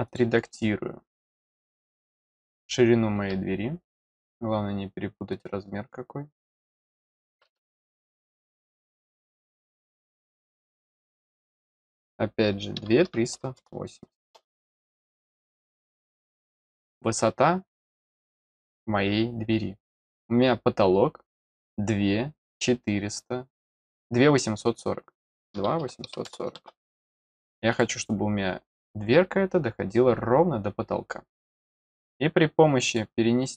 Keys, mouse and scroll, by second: 0.0 click, 4.1 click, 5.3 click, 6.3 click, 7.0 click, 7.9 click, 10.1 click, 11.6 click, 18.1 click, 27.7 click, 31.4 click, 32.1 scroll up 1, 32.8 click.